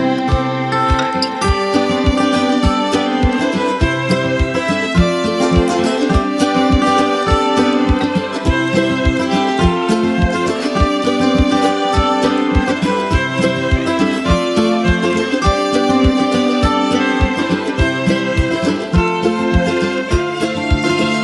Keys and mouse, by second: 0.0 ctrl+z, 0.8-1.7 drag, 2.3 ], 3.0-4.3 drag, 4.4 space, 4.6-5.2 click, 5.2 space, 5.2 click, 6.0 space, 6.1 click, 6.5 space, 6.9 click, 8.3 space, 8.4-9.0 click, 8.8 space, 9.2-11.1 drag, 21.1-21.2 drag.